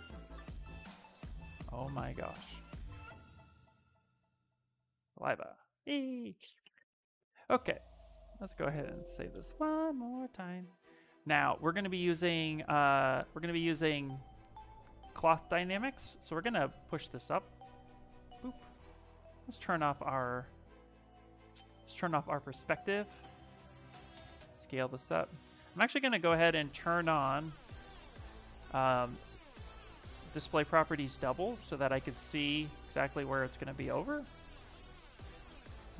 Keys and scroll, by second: 0.0-1.2 typing, 3.0-4.7 typing, 8.5 Return, 9.1 Return, 19.3 p.